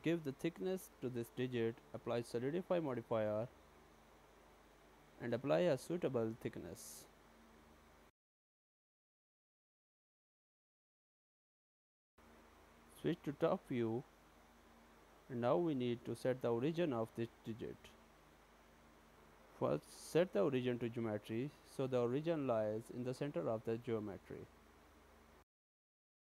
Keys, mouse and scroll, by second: 2.0 click, 2.0 middle click, 2.4-2.9 scroll up 2, 3.0 middle click, 4.6 click, 11.1 click, 12.1 click, 14.5 click, 15.3-15.8 scroll down 3, 15.8 shift+scroll up 1, 15.9 shift+middle click, 16.3 shift+scroll down 1, 17.0 right click, 22.0 right click, 24.3 shift+s.